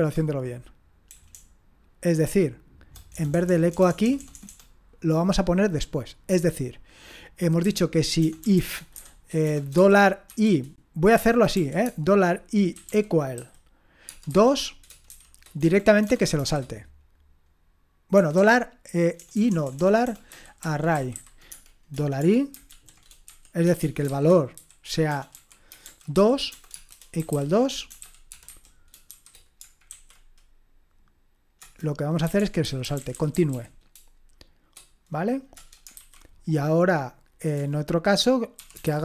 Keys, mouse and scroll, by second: 0.3 BackSpace, 1.3-4.5 typing, 8.2-16.4 typing, 18.2-29.9 typing, 31.6 Return, 32.0-34.0 typing, 35.6 Return, 35.7-36.4 typing, 37.5 Return, 38.3-39.0 typing.